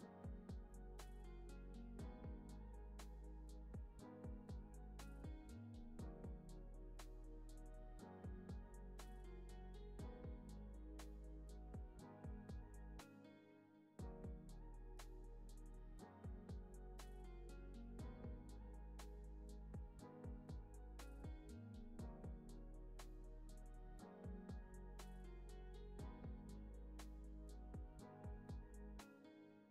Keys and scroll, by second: 4.9 alt+z, 5.6 alt+x, 10.5 z, 11.7 space, 28.4 space, 28.8 z.